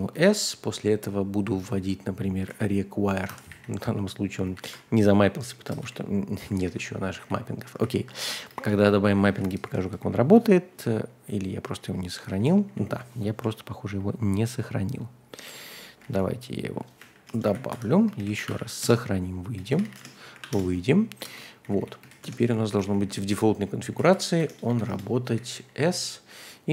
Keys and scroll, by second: 0.0-0.1 typing, 2.1-3.5 typing, 4.4 ctrl+d, 4.6 ctrl+d, 5.8 typing, 6.5 ctrl+h, 7.0 typing, 7.8 ctrl+l, 8.3-13.2 typing, 16.0 super+c, 17.0-26.0 typing, 17.4 super+v, 17.7 Escape, 20.5 Return.